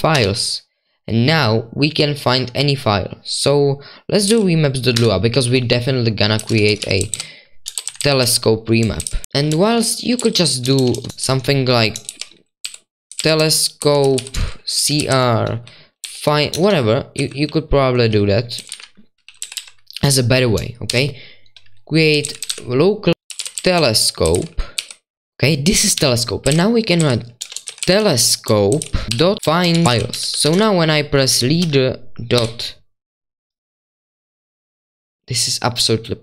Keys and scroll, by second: 0.0-0.1 typing, 4.5-32.3 typing.